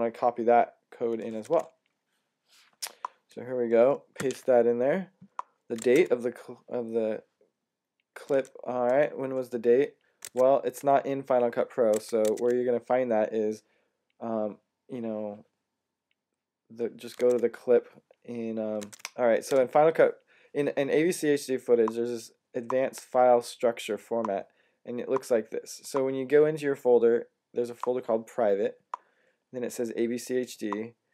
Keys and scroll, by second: 1.2 Tab, 5.7 Tab, 8.2 Tab, 10.1 super+Tab, 11.8 super+Tab, 12.1 super+Tab, 17.0 Tab, 18.7 super+Tab.